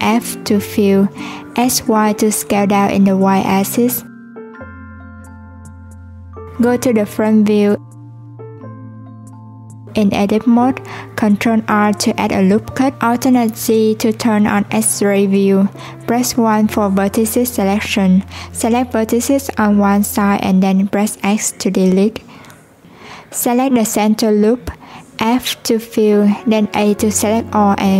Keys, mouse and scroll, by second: 7.8 click, 8.5 click, 9.2-9.9 scroll up 1, 9.9-10.6 scroll up 1, 10.6 Tab, 11.7 ctrl+r, 19.3 1, 19.9 click, 21.3 x, 23.4 click, 25.1 scroll down 1, 25.2-27.2 middle drag, 27.2 f.